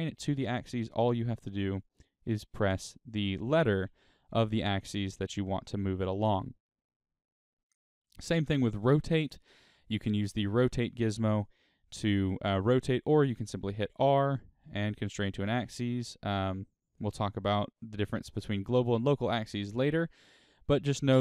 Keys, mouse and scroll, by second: 5.9 right click, 8.2 click, 10.1-16.9 drag, 13.1 r, 16.9 right click.